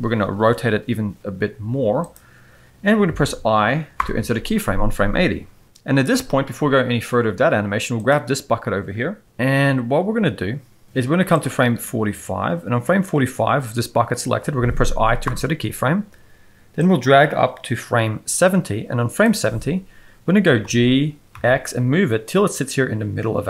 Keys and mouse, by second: 0.7 r, 4.0 i, 11.4-13.0 drag, 15.2 i, 16.8-19.2 drag, 20.6 g.